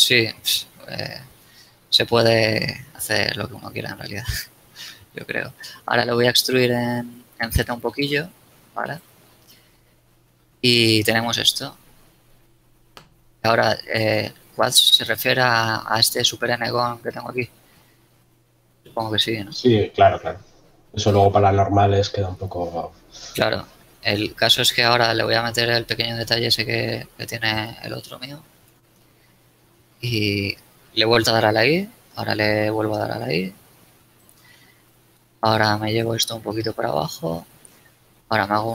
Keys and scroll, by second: 5.3 z, 6.7 z, 12.3 z, 15.1 Tab, 22.1 i, 29.1 KP_Decimal, 32.8 i, 35.4 ctrl+space.